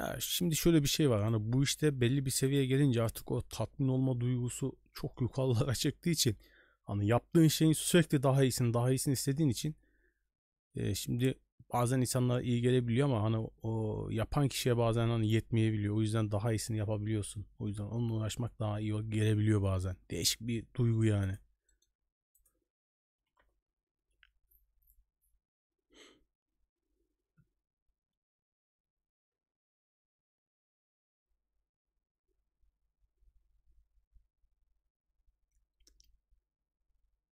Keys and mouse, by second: 2.4-3.3 drag.